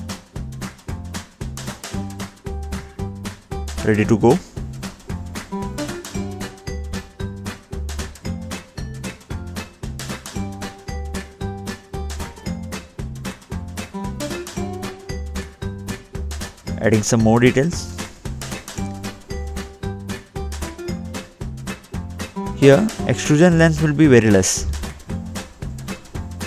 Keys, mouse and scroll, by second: 2.4-2.9 scroll up 3, 2.9 scroll down 1, 3.4 middle click, 4.2 scroll up 2, 4.4 scroll down 2, 4.9 middle click, 7.9 scroll up 2, 8.4 scroll down 2, 9.6 click, 12.0 middle click, 12.8-13.9 scroll up 1, 13.9 scroll up 1, 14.0 middle click, 14.4-15.0 scroll down 2, 15.0 scroll up 1, 15.4 middle click, 16.7 middle click, 16.7-17.3 scroll down 2, 18.4 middle click, 19.9 double click, 21.5 click, 21.5-22.3 scroll up 3, 22.6 middle click, 23.2 middle click, 23.6-23.9 scroll up 1, 23.9-24.3 scroll down 2, 25.6 scroll up 2.